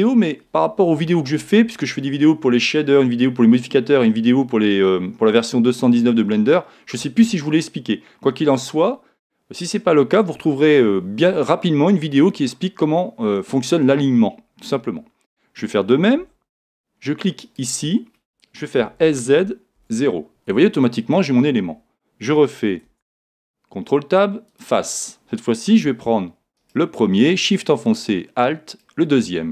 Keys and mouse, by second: 16.2 a, 17.4 right click, 18.8 s, 22.8 ctrl+Tab, 26.6 right click.